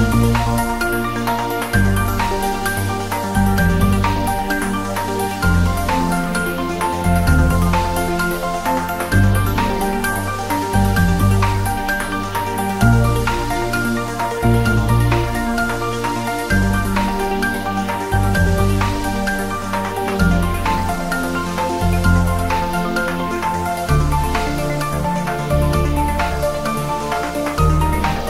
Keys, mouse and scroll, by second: 0.7 Tab, 1.2 click, 2.7 ctrl+b, 4.1-4.7 scroll down 1, 4.7 click, 4.8 Tab, 5.0-5.3 scroll up 1, 6.0 click, 6.5-7.1 scroll down 1, 7.1-8.4 drag, 8.4-8.9 scroll up 1, 8.9 click, 9.8 click, 10.5 g, 10.7 Up, 12.1 Return, 12.5 click, 12.7-13.2 scroll down 1, 13.2 click, 14.1-14.4 scroll down 1, 14.4 click, 14.7 g, 15.3 y, 15.8 click, 16.0 scroll down 1, 16.1 click, 17.0 scroll up 1, 22.2-23.3 drag, 23.6 scroll up 1, 27.6 shift+a.